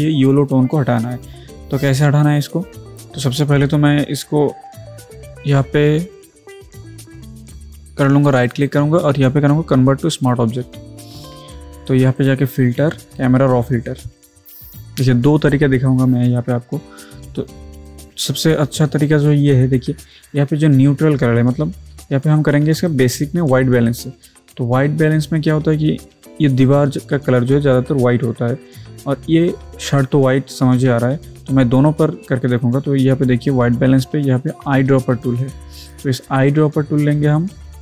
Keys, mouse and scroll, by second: 9.7 right click, 10.2 click, 17.2 alt+Num_Lock, 17.2 alt+click, 22.9 click, 35.1 click.